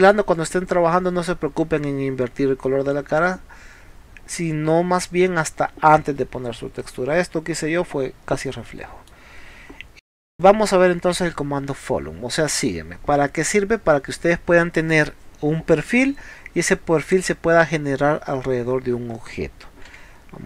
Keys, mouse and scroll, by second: 0.4-0.7 scroll down 1, 0.9 middle click, 8.7 middle click.